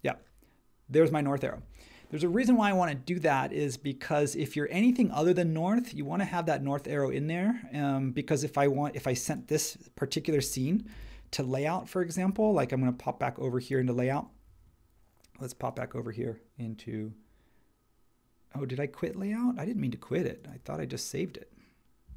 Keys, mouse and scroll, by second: 10.9 super+s.